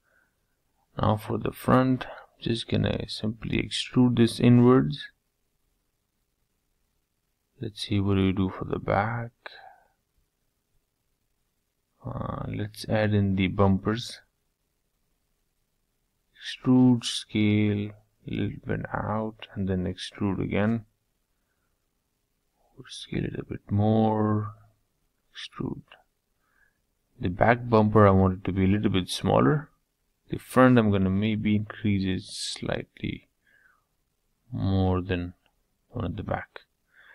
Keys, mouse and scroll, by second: 1.9 middle click, 2.8 scroll down 1, 2.9 middle click, 3.8 scroll up 2, 4.0-6.0 middle drag, 7.5-11.9 middle drag, 11.9 click, 12.3 shift+click, 12.7-13.9 middle drag, 13.9 e, 19.1 s, 22.5 e, 23.7-25.5 middle drag, 26.5 click, 27.1 shift+click, 27.5 middle click, 28.2 scroll down 1, 28.3-29.9 middle drag, 29.9 e, 33.6 s, 35.5 middle click, 36.1 e.